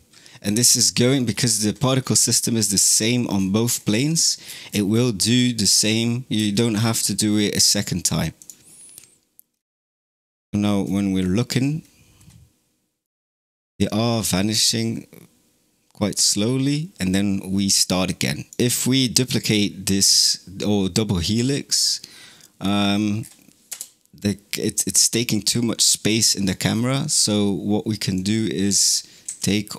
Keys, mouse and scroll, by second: 1.1-2.9 scroll up 19, 3.2-3.9 scroll down 11, 3.9-4.3 middle drag, 4.3-5.1 scroll down 19, 6.2 space, 8.2 click, 9.4-10.1 scroll up 4, 10.1 KP_0, 11.0-12.0 scroll up 10, 12.0-12.8 scroll down 3, 15.4 click, 16.0 drag, 16.2 middle drag, 16.4 right click, 16.8 middle click, 18.5 click, 21.4-21.9 scroll down 1, 21.9-22.8 middle drag, 22.8-23.3 scroll down 10, 23.6 KP_0, 26.3-26.7 scroll up 10, 28.0 click, 29.1 s.